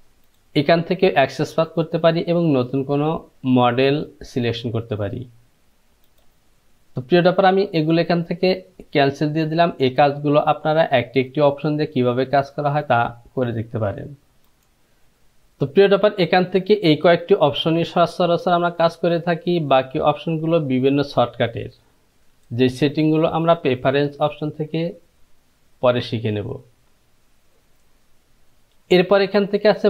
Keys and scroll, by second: 14.8 F6.